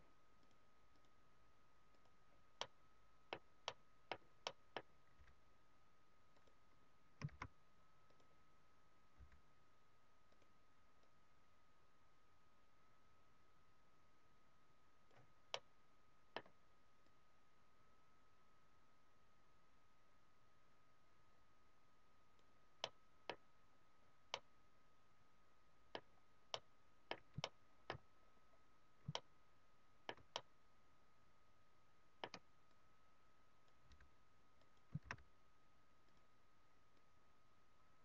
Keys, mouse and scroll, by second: 0.4 click, 2.5 middle click, 3.6 middle click, 4.4 middle click, 5.2 f, 6.6 click, 7.2 shift+f, 8.3 click, 9.2 f, 10.4 click, 10.9 click, 15.5 middle click, 17.1 click, 22.9 middle click, 24.3 middle click, 26.0-26.5 scroll down 3, 26.4 middle click, 27.5 shift+middle click, 28.1-28.8 scroll up 4, 29.0 shift+middle click, 30.3 middle click, 32.6 click, 33.9 f, 34.7 click, 35.0 shift+f, 36.2 click, 37.1 click.